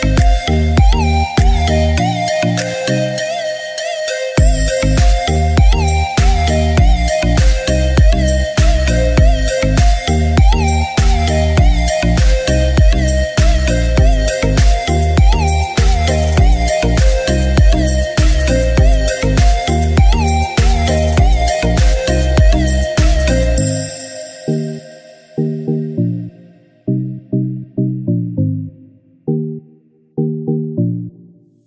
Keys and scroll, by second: 1.4 ctrl+z, 3.2 ctrl+t, 5.6 Return, 6.0 ctrl+d, 8.9 ctrl+t, 11.7 Return, 11.9 ctrl+d, 14.9 c, 15.4 ctrl+z, 15.7 ctrl+z, 16.8 ctrl+t, 19.1 Return, 19.3 ctrl+d, 22.7 ctrl+shift+e, 29.5 ctrl+j, 30.4 ctrl+shift+a.